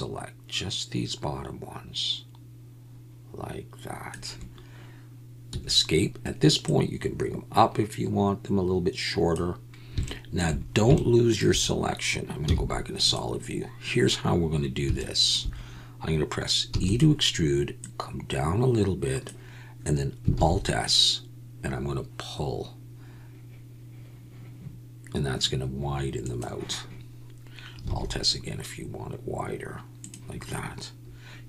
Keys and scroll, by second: 5.5 Escape, 12.4 z, 16.7 e, 20.3 alt+s, 27.9 alt+s.